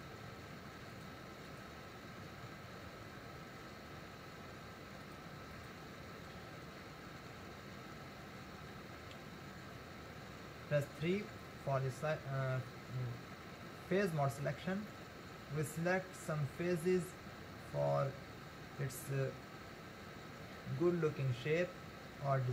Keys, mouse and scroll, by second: 2.5 ctrl+r, 11.3 3, 14.9-18.0 middle drag.